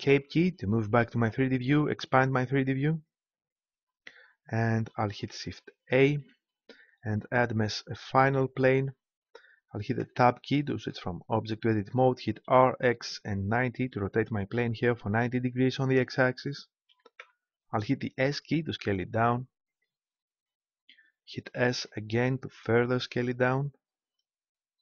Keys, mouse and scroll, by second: 0.0 click, 0.0 middle click, 0.0 right click, 2.5-4.2 drag, 4.3-5.9 middle drag, 6.1 shift+a, 10.0 Tab, 12.4 r, 16.8 s, 19.8-21.4 drag, 21.4 s.